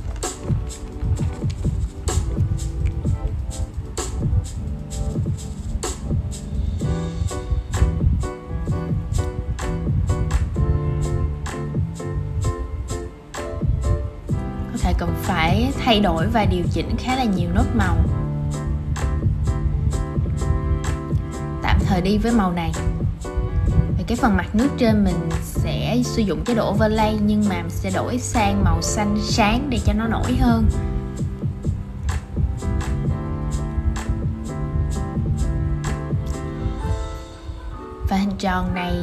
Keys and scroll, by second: 15.3 super+z, 15.6 super+z, 16.7 super+z, 33.0 super+z.